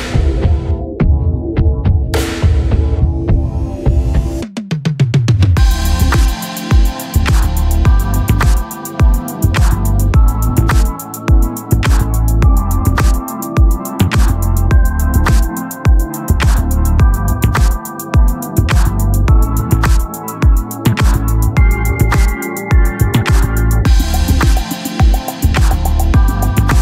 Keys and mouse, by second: 5.0 click, 11.0 click, 14.1 click, 15.7 Return, 18.3 click, 26.1 click.